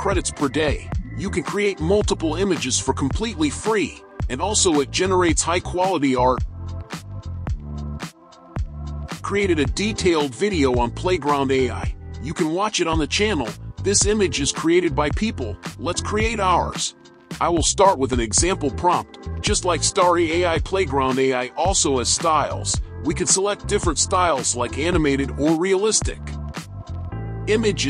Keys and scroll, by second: 1.6 alt+a, 15.8 alt+a, 19.4 alt+a.